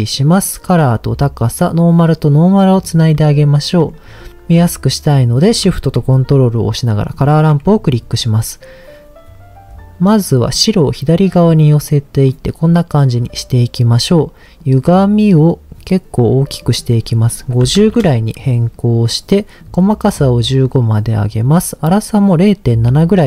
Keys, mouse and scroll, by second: 0.3 click, 1.7-2.9 drag, 3.1-3.7 scroll up 1, 3.7 middle click, 3.7 scroll up 1, 7.1 ctrl+shift+click, 7.6-8.1 scroll up 2, 10.5 click, 11.5 click, 14.6-16.6 drag, 16.8-17.9 drag, 19.6 click, 21.2-23.0 drag.